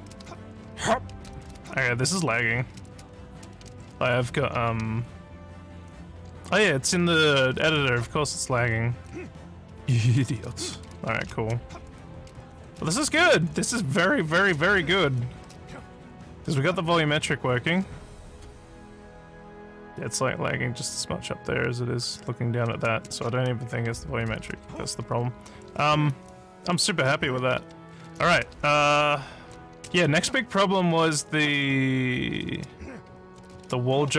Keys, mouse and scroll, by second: 0.0-17.7 typing, 22.2-34.1 typing.